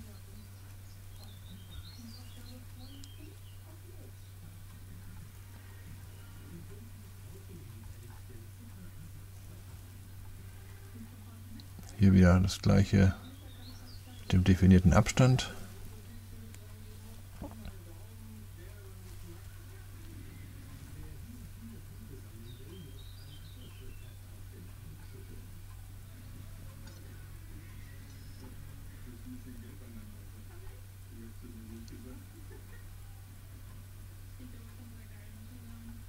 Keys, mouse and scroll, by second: 0.2 click, 2.3-4.9 drag, 5.5 click, 5.9 ctrl+c, 6.3 ctrl+v, 8.0 click, 9.8 click, 11.1 click, 12.0-12.8 scroll down 1, 13.7 click, 16.9 click, 19.1 x, 22.1 click, 23.2 click, 23.9 click, 25.8-27.9 typing, 28.1 Return, 29.0 click, 30.1 click, 32.5 click, 34.3-35.3 drag, 35.3-35.7 scroll down 1, 35.7 middle click, 35.9-36.0 right drag.